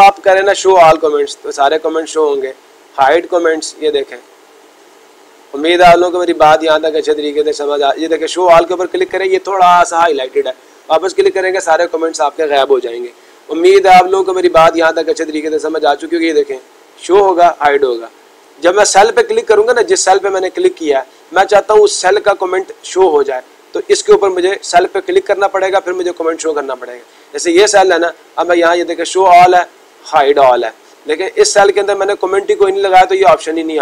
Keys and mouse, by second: 0.6 click, 2.9 click, 4.1 click, 4.8 click, 5.6 click, 6.2 click, 7.1 click, 8.3 click, 9.2 click, 10.6 click, 16.2-18.3 drag, 18.6-19.6 drag, 22.7-23.7 drag, 26.8-27.9 drag, 29.0-31.0 drag, 31.7 click.